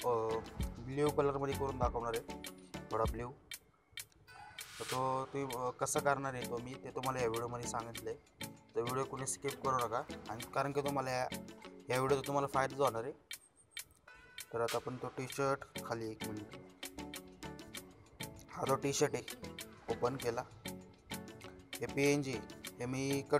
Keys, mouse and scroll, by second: 0.6 click, 3.8 t, 5.8 click, 8.9 space, 9.3 scroll down 1, 18.4 click.